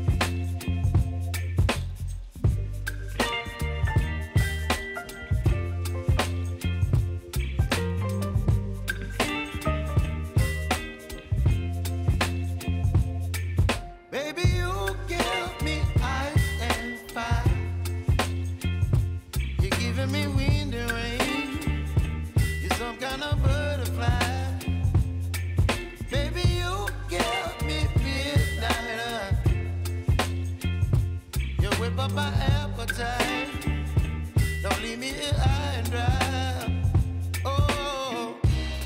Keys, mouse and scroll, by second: 2.7 -, 3.9-17.0 drag, 20.9 ctrl+alt+Home, 22.2 s, 22.8 click, 23.9 v, 24.6 click, 31.5 Right, 32.5-38.8 drag.